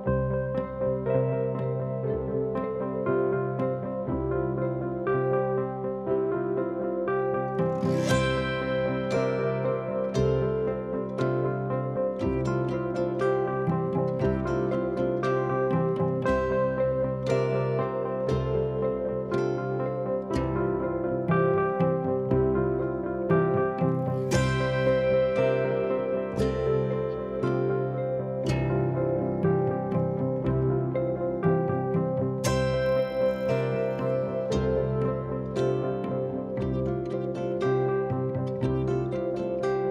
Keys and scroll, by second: 0.0-0.8 typing, 3.1 2, 19.4 ctrl+d, 19.5 Escape, 28.0 ], 29.5 4, 30.7-32.1 typing, 39.3 0, 39.4 Return, 39.7 3.